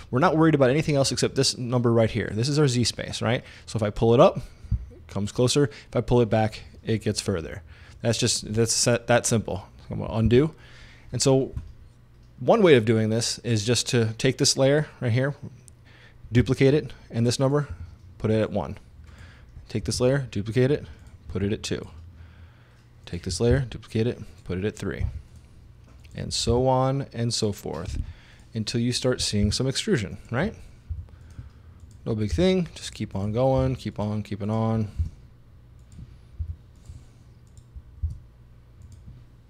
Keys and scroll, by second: 10.3 super+z, 16.4 super+d, 17.7 i, 19.9 super+d, 21.3 2, 23.5 super+d, 25.1 3, 26.5 super+d, 28.0 4, 29.5 super+d, 30.9 5, 32.4 super+d, 33.6 6, 35.0 super+d, 36.4 7, 38.1 super+d.